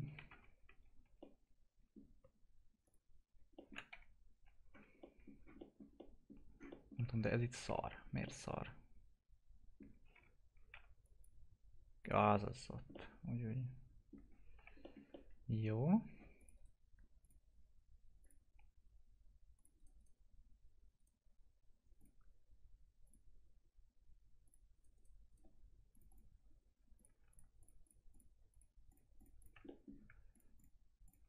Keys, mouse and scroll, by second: 0.3 F3, 1.0 alt+q, 1.1 alt+middle click, 2.1 scroll down 1, 2.8 click, 3.3 scroll down 1, 3.5 alt+middle click, 3.9 F3, 4.4-4.9 scroll down 1, 5.3 scroll down 1, 5.5 middle click, 6.4 scroll down 1, 7.0 F4, 7.9 scroll down 1, 10.1 1, 10.7 F3, 11.0 click, 12.3 F3, 12.6 scroll down 1, 12.9-14.5 alt+middle drag, 14.5 F4, 14.8 middle click, 15.1 alt+middle click, 16.3 click, 16.5 right click, 17.2 click, 19.7 right click, 21.9 click, 24.7 right click, 25.9 click, 27.3 ctrl+click, 29.6 middle click, 30.3 ctrl+click.